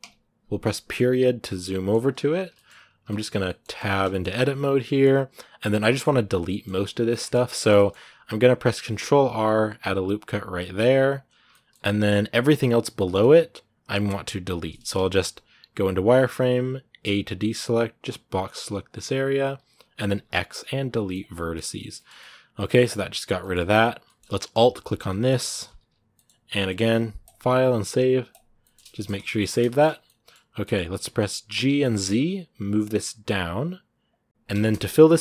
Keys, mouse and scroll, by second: 0.7-2.5 middle drag, 2.5-3.2 scroll up 3, 2.8 shift+middle click, 3.2 middle click, 3.6 Tab, 3.9-5.1 shift+middle drag, 5.1 a, 5.6-6.8 middle drag, 6.8 scroll down 1, 6.9 middle click, 7.7-8.8 scroll up 1, 8.8 ctrl+r, 11.3 shift+middle click, 11.6 scroll down 2, 12.7-14.8 middle drag, 14.8 z, 21.7 shift+middle click, 22.5 scroll up 2, 22.7 middle click, 23.5 scroll up 2, 23.8-25.3 middle drag, 25.3 alt+right click, 25.9-28.9 middle drag, 28.9 scroll down 2, 29.1 shift+middle click, 29.7 scroll down 1, 29.8 middle click, 30.7 g, 34.3 scroll down 2, 34.4 shift+middle click, 34.8-35.2 scroll up 1.